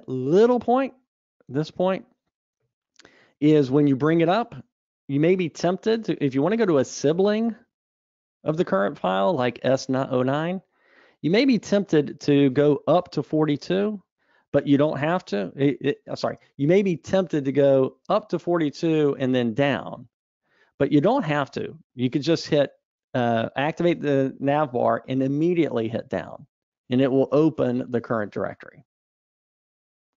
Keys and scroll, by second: 4.5 super+Up, 20.9 Escape, 22.0 super+Up.